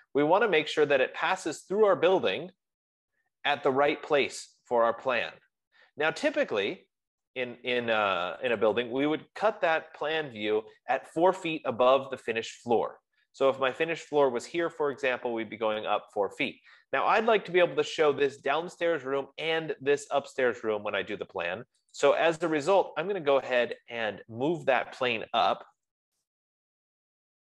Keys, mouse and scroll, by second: 9.0 click, 9.2 click, 10.9 F15, 22.4 click, 24.3 click, 25.7-26.8 typing.